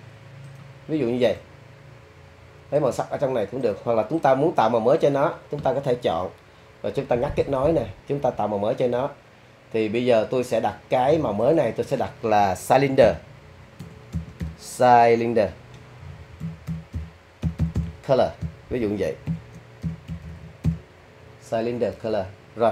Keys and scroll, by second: 13.0 s, 13.8 BackSpace, 14.1 c, 14.4 y, 16.4-17.7 typing, 19.0-20.6 typing.